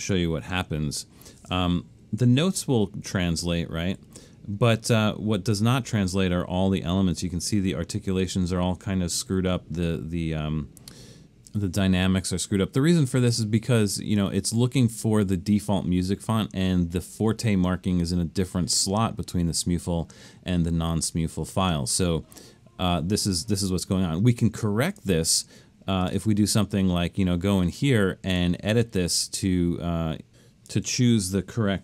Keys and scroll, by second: 0.0 super+v, 2.5 super+=, 3.1 super+=, 4.0 super+=.